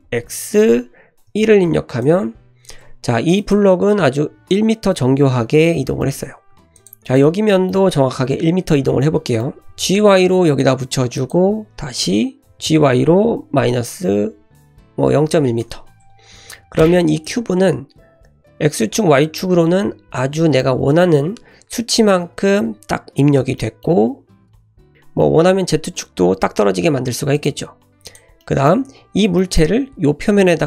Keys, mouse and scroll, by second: 2.8 Tab, 3.3 click, 3.8-4.2 scroll up 1, 6.0 middle click, 6.2 Tab, 6.5 3, 6.7 click, 7.1-7.9 middle drag, 9.4 middle click, 9.7 g, 12.4 ctrl+z, 12.4 g, 16.0 Tab, 16.5-16.8 middle drag, 16.8-17.2 scroll up 1, 17.2 click, 20.6 middle click, 23.6 middle click, 24.1-24.6 scroll up 1, 24.6 shift+middle click, 24.8 middle click, 27.3 click, 27.7-28.1 scroll down 2, 28.0 click, 28.4-28.7 middle drag, 28.9-29.4 scroll up 2, 29.4 shift+middle click.